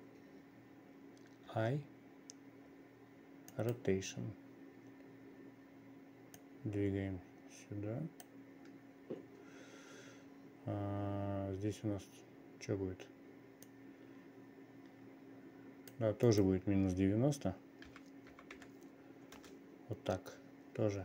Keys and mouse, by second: 6.9-8.8 drag, 14.2-16.6 drag, 16.8-20.0 drag.